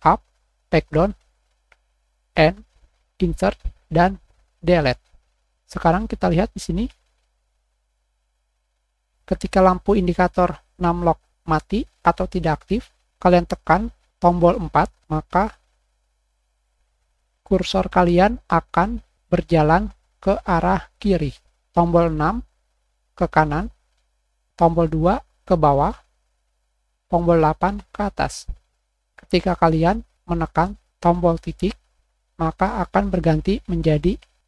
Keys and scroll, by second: 7.0 Return, 7.1 Up, 7.2 Left, 9.1 8, 15.0 7.